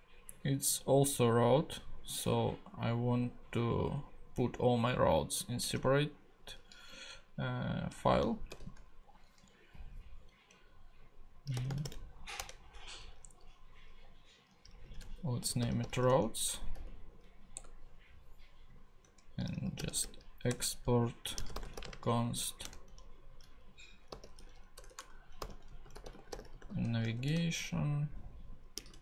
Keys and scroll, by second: 8.5 super+n, 11.3-12.3 typing, 12.3 Return, 14.6-16.6 typing, 16.7 Return, 19.0 Return, 19.3-22.2 typing, 24.1-27.1 typing, 28.5-29.0 typing.